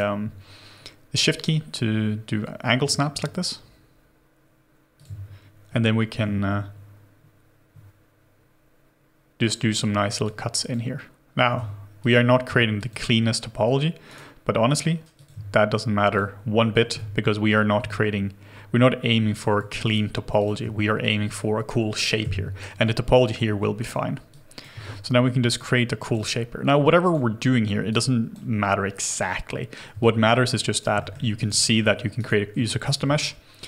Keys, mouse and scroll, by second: 6.2 ctrl+z, 11.5 ctrl+z, 12.7 shift+click, 14.0 right click, 16.1 shift+click, 16.9 ctrl+z, 16.9 shift+click, 19.6 ctrl+z, 19.6 w, 19.8 right click, 19.8 w, 21.0 shift+click, 22.2 Delete, 23.8 right click, 24.7 right click, 26.9 r, 29.5 scroll up 1, 30.0 alt+click, 31.0 alt+middle click, 31.3 alt+right click, 31.6 alt+middle click, 32.1 alt+right click, 32.7 alt+click, 33.0 alt+middle click.